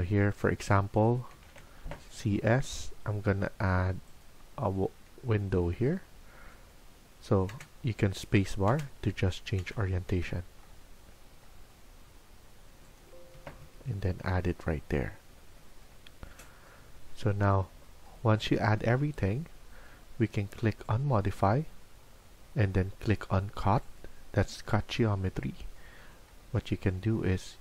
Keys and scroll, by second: 15.9 Escape, 18.0 Escape.